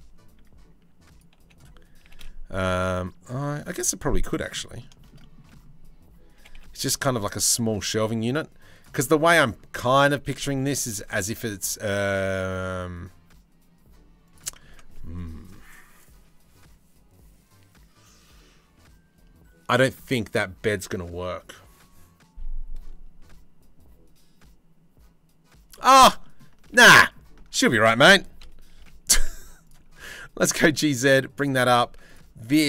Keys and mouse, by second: 1.6 g, 4.1 click, 5.9 g, 10.2 g, 14.3 Tab, 25.3 shift+drag, 25.8 click, 26.5 ctrl+z, 28.0 KP_3, 28.3 KP_1, 28.9 z, 29.6 g, 31.5 Tab, 31.6 click.